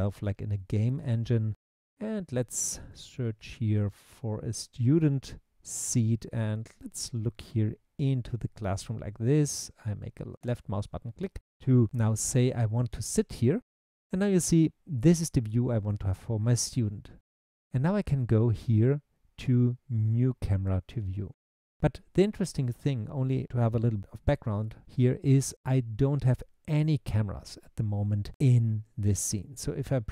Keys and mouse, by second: 0.0-5.1 typing, 10.5 click.